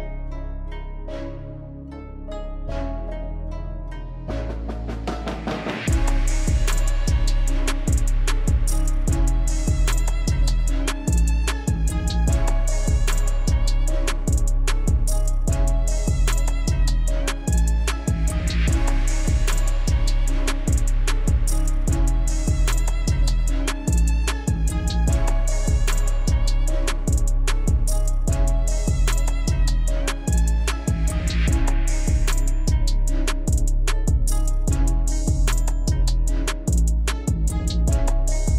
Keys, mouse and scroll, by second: 0.0-0.4 typing, 0.0 scroll up 1, 0.2 click, 0.9-5.8 drag, 6.9 [, 7.1 [, 7.6 [, 7.9-11.9 drag, 11.9-14.9 alt+drag, 15.9 scroll down 1, 16.2-17.6 drag, 17.6 alt+scroll up 1, 17.9 alt+click, 18.5 alt+scroll down 2, 18.9 alt+scroll up 1, 19.4 alt+scroll down 1, 19.9 alt+scroll up 1, 20.1 click, 20.7-21.1 scroll down 2, 20.9 click, 21.3 click, 21.9 alt+scroll up 1, 22.1 click, 22.3 scroll down 1, 22.5 click, 23.4 scroll down 1, 23.6 click, 24.0 scroll up 1, 24.2 click, 24.5 alt+scroll down 1, 25.2 alt+scroll up 1, 25.2 alt+scroll down 1, 32.3 click, 34.5 click, 37.1 click.